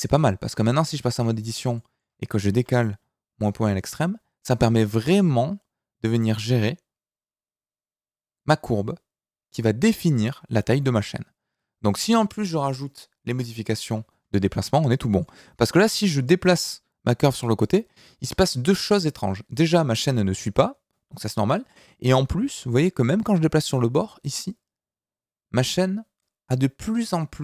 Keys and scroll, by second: 2.5 g, 13.8 Escape, 16.0 g.